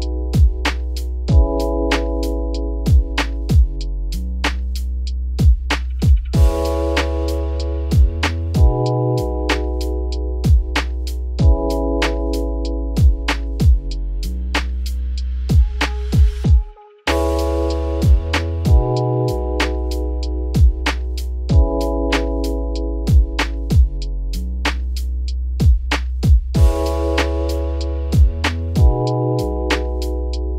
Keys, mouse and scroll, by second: 0.2 g, 3.3 Tab, 3.5 scroll down 3, 3.6-4.1 middle drag, 4.1 ctrl+s, 4.2 scroll down 2, 4.4-4.8 middle drag, 4.8 `, 6.3 click, 7.1 ctrl+1, 7.5-8.1 scroll up 3, 8.1 click, 8.5 scroll down 4, 8.8 shift+middle drag, 9.0-10.1 scroll up 8, 10.1 g, 11.7 scroll down 6, 12.0 shift+middle drag, 12.2-12.7 scroll up 4, 12.7 `, 13.2-13.6 middle drag, 13.6-14.1 scroll up 3, 14.1 `, 14.5-14.9 middle drag, 14.9 Tab, 15.2 `, 15.8 scroll down 3, 16.0 scroll up 1, 16.1 middle click, 16.9-17.3 scroll up 5, 17.3-19.0 middle drag, 19.0 g, 20.7 scroll down 2, 20.7 middle click, 21.1 3, 21.3 click, 21.8 alt+click, 22.8 s, 25.2 Tab, 25.5 `, 26.1 ctrl+s, 26.5-27.0 scroll down 9, 27.0 shift+middle drag, 27.2-28.4 scroll up 5, 28.4-29.9 scroll down 5, 29.9 scroll down 1, 30.0 Tab.